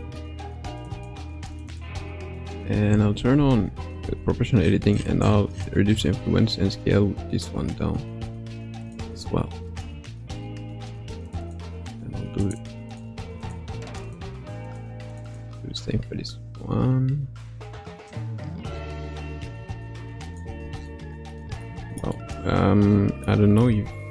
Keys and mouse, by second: 0.9 click, 1.5 click, 1.7 click, 2.8 o, 4.0 s, 11.2 click, 11.4 click, 12.6 click, 12.9 click, 13.4 click, 13.9 click, 15.1 click, 15.9 s, 20.9 middle click, 21.8 shift+middle click, 22.1-23.3 middle drag, 23.8 shift+middle click.